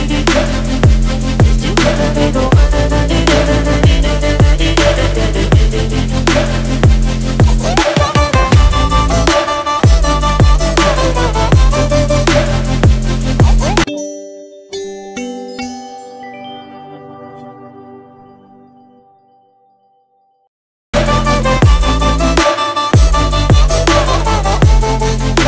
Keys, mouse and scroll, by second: 0.9 right click.